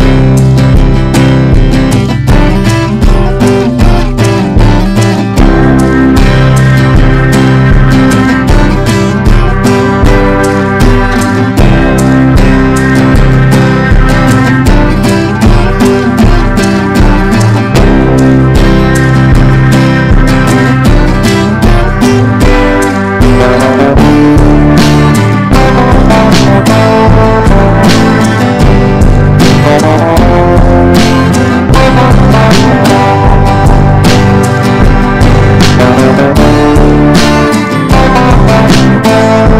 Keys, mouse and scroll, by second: 1.7 Return, 2.6-5.6 typing, 6.9 click, 7.5 ctrl+e, 8.4 ctrl+b, 9.0 click, 9.8 Return, 10.7-28.5 typing, 18.1 Return, 29.4 click, 31.3 right click, 32.0-39.2 drag.